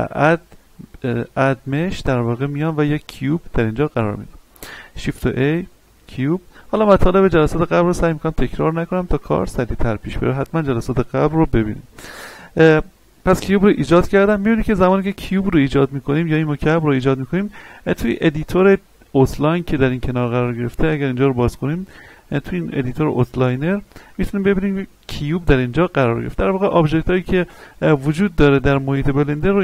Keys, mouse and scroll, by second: 6.0 click, 16.1-18.0 scroll up 1.